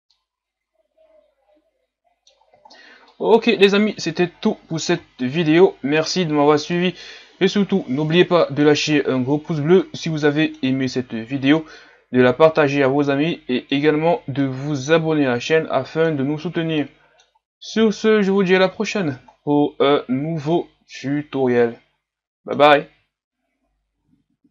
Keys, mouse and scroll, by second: 0.1-2.7 middle drag, 2.7-3.1 scroll down 6, 3.1-6.3 middle drag, 6.3-6.7 scroll down 3, 6.7-8.9 middle drag, 8.9-9.5 scroll up 2, 9.5-9.8 scroll down 2, 9.8-11.3 middle drag, 11.3 scroll down 1, 11.5-18.0 middle drag, 18.0-18.6 scroll down 3, 19.3-19.7 scroll up 1, 20.6-24.5 middle drag.